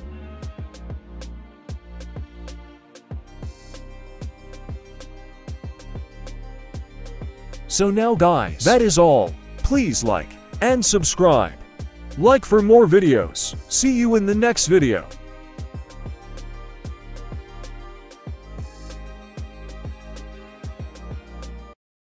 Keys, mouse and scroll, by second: 0.4 right click, 0.6 middle click, 1.0 middle click, 1.3 r, 2.9 right click, 3.1 r, 4.6-5.8 scroll up 3, 4.9 shift+middle drag, 5.8 click, 5.8 right click, 6.6 g, 7.6 click, 7.6 right click, 7.9 g, 8.9 click, 8.9 right click, 9.0 g, 10.4 click, 10.4 right click, 10.7 g, 11.7 middle click, 12.1 g, 13.4 right click, 13.7 g, 14.5 right click, 14.9 g, 15.8 right drag, 16.2 g, 17.9 middle click, 18.7 scroll down 1, 18.9 middle click, 19.3 right click, 19.9 right click, 20.3 e, 21.1 r.